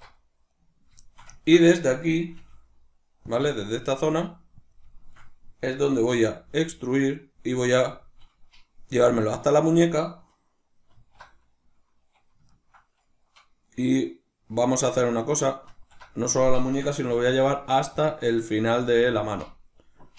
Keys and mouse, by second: 0.5 right click, 1.1-3.3 ctrl+shift+middle drag, 2.3 g, 3.3 click, 3.6-4.7 shift+middle drag, 4.0 g, 4.7 click, 4.9-8.1 shift+middle drag, 6.1 e, 8.1 click, 10.9 alt+o, 12.5-17.1 ctrl+middle drag, 15.7 alt+o, 17.1 g, 18.0 click, 18.8 g, 19.4 click.